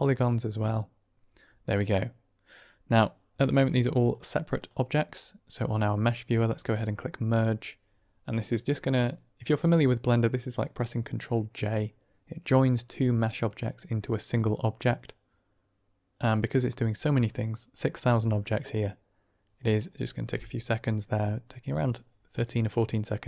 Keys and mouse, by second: 1.8-2.9 middle drag, 4.5 drag, 6.6-18.5 drag, 21.1-21.7 middle drag, 22.4-23.2 middle drag.